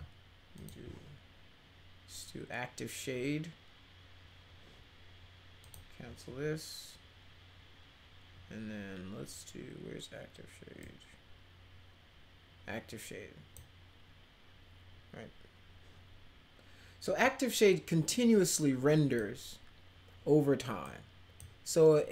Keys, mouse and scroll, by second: 0.5 click, 5.6 click, 10.8-13.5 drag, 17.2-19.1 drag, 20.8-21.3 drag.